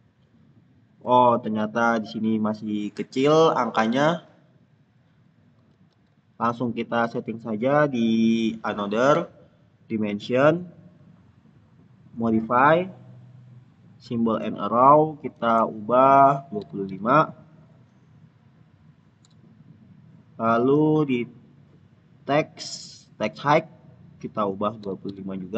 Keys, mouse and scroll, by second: 2.4 click, 3.8 ctrl+z, 5.6 ctrl+z, 8.2 click, 16.3-17.3 typing, 18.9-19.6 typing, 20.6 click, 23.2 click, 24.7 typing.